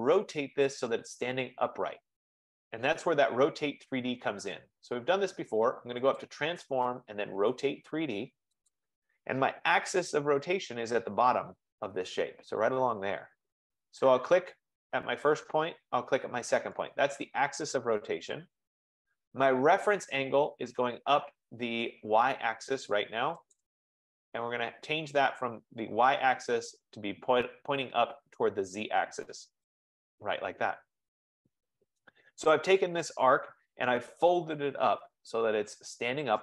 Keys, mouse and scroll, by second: 6.3 click, 8.8 click, 12.2-13.9 drag, 15.2-17.0 drag, 21.2 click, 23.8-28.7 drag, 29.8-30.9 drag, 31.3-34.9 drag.